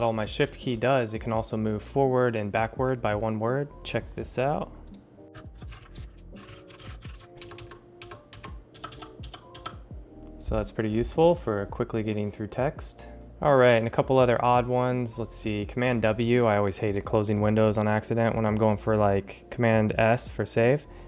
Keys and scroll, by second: 5.2 Return, 5.3-7.6 typing.